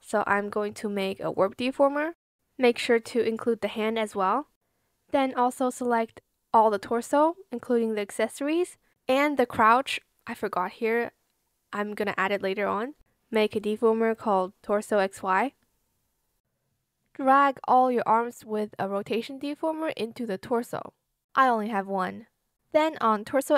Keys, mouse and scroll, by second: 0.0-0.8 typing, 5.1 shift+click, 5.8 ctrl+z, 7.6 shift+click, 9.9-12.2 typing, 13.7 ctrl+alt+shift+click.